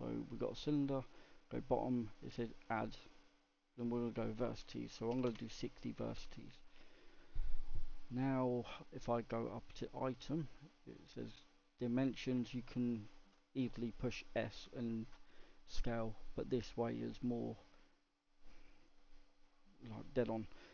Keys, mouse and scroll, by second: 1.9-6.5 drag, 9.4 click, 10.5-13.6 drag, 17.3 click, 17.8-20.7 drag.